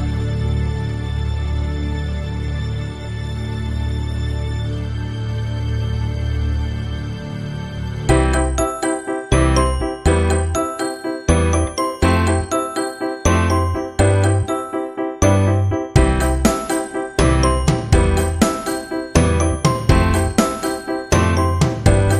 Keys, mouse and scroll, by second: 0.4 KP_1, 1.0 click, 1.4 middle click, 2.5 shift+d, 3.0 click, 3.5 r, 4.3 click, 4.9 middle click, 5.3 click, 6.0 KP_3, 6.6 r, 7.6 click, 8.0 middle click, 9.6 r, 10.8 click, 11.8 r, 12.2 middle click, 13.1 middle click, 13.7 KP_0, 14.2 shift+z, 16.3-17.5 drag, 17.7 click, 20.1 shift+z, 20.4 KP_1, 21.3 click.